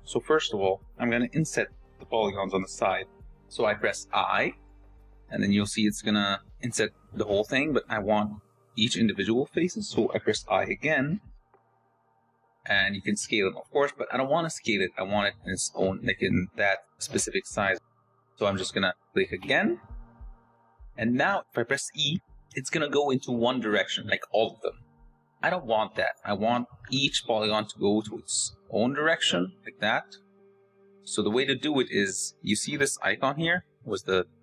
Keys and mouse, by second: 3.6 i, 21.9 e, 26.5 ctrl+z.